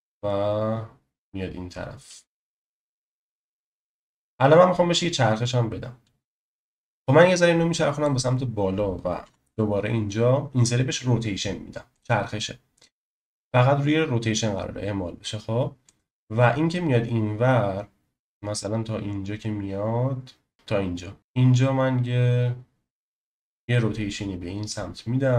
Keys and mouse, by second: 3.2 space, 4.2-6.2 drag, 7.0 ctrl+z, 7.0 click, 9.2 i, 15.9-21.2 drag.